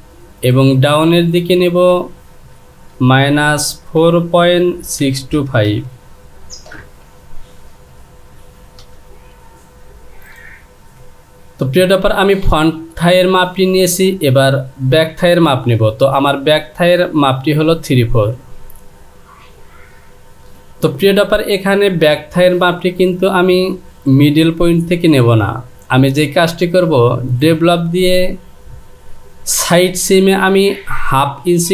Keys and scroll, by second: 1.7 Down, 2.9 KP_Subtract, 3.9 KP_4.